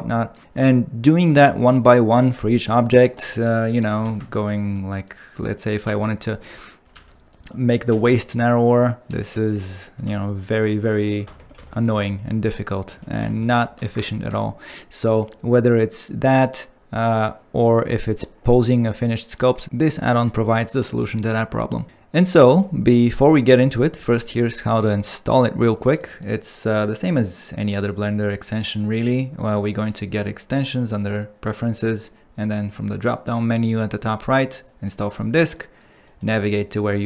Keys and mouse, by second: 4.0 ctrl+Tab, 5.9 alt+q, 7.0 alt+q, 7.3 click, 7.9 alt+q, 8.3 click, 10.1 alt+q, 11.4 ctrl+z, 11.6 ctrl+z, 11.8 ctrl+z, 12.0 ctrl+z, 12.1 ctrl+z, 12.3 ctrl+z, 12.4 ctrl+z, 12.9 ctrl+z, 13.3 ctrl+z, 14.1 ctrl+Tab, 15.0 middle click, 19.3 middle click, 26.7-27.8 drag.